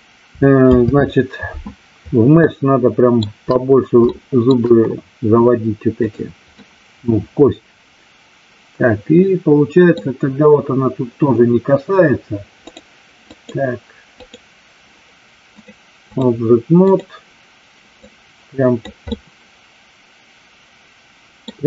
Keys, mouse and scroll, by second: 0.6 ctrl+z, 2.3-3.2 shift+middle drag, 4.1-4.5 shift+middle drag, 5.9 click, 6.5-10.0 middle drag, 12.7 click, 13.3 click, 15.7 click, 18.0 click, 19.1-21.5 middle drag.